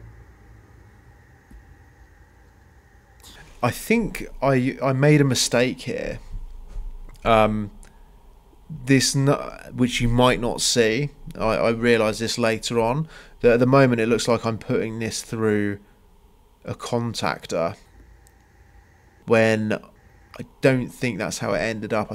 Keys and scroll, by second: 1.1 Escape, 4.9 Escape, 7.3 Escape, 10.7 space, 14.0 space, 15.8 Escape.